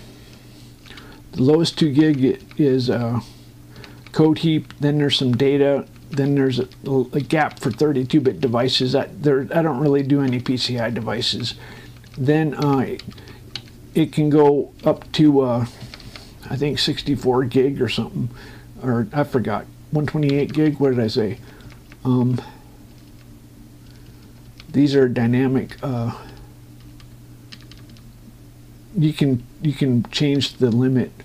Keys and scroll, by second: 1.9 Up, 2.8 Down, 7.0 Up, 8.0 Down, 13.8 Up, 14.8 Right, 15.5 Left, 16.5 Right, 21.1 ctrl+Up, 30.8 Down.